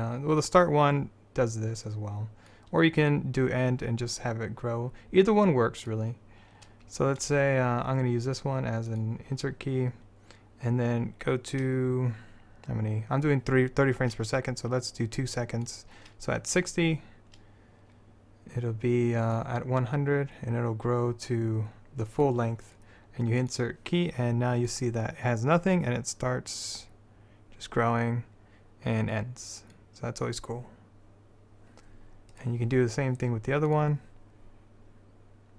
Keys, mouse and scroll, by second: 0.5-6.0 drag, 8.4-12.7 drag, 12.7-14.0 middle drag, 15.8-18.1 drag, 19.5-21.3 drag, 22.8-24.7 drag, 24.8-26.5 drag, 32.5-33.8 drag, 33.8-35.4 middle drag, 35.4-35.5 drag.